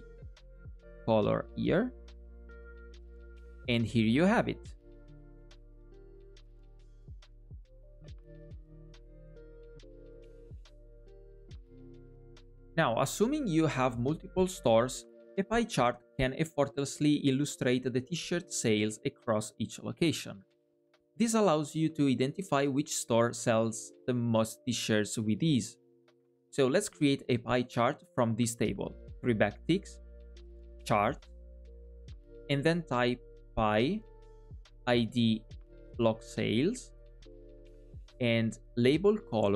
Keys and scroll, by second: 29.6 alt+\.